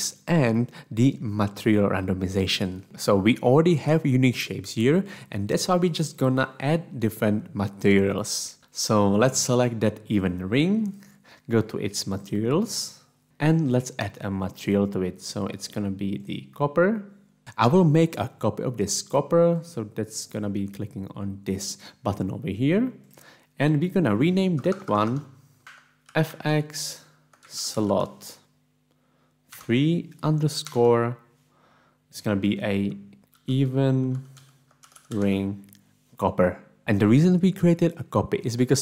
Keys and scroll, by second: 25.3-30.7 typing, 25.6 End, 25.9 Home, 33.3-35.8 typing.